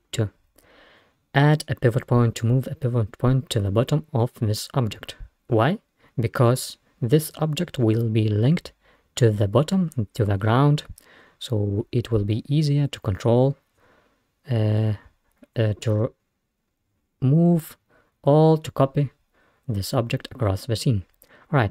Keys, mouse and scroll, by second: 0.0-0.5 scroll up 1, 11.8 scroll down 1, 12.6-13.2 scroll up 1, 18.3 scroll down 1, 19.4-20.1 scroll up 2, 20.1-21.0 scroll down 1.